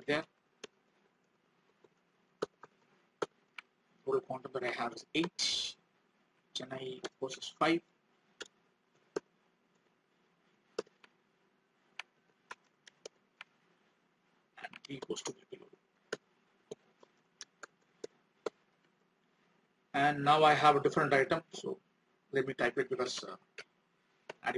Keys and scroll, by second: 3.6 alt+Tab, 11.1 alt+Tab, 19.7 alt+Tab.